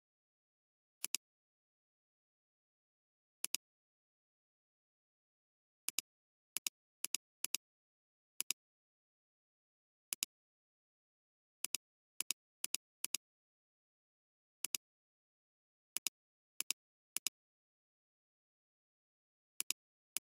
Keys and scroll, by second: 3.4 alt+space, 4.8 [, 8.4 space, 19.4 typing.